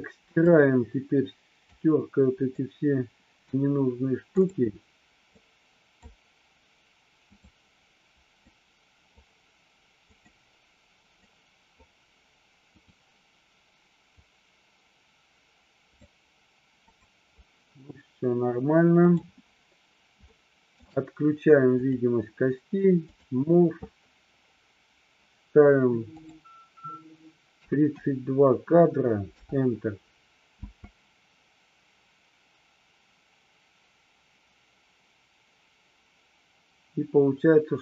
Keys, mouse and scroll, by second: 0.5-1.8 drag, 2.6-3.6 drag, 4.4 click, 5.4 click, 7.3 click, 8.5 click, 10.1 click, 11.3 click, 12.9 click, 14.3-16.3 drag, 16.9 click, 19.1 click, 20.4 shift+middle click, 21.8 click, 23.1 click, 26.1-29.8 drag, 30.6 space.